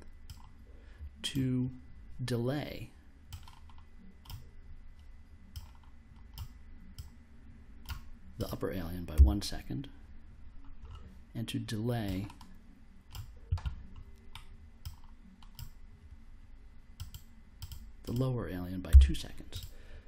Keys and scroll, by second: 9.1 1, 18.9 2.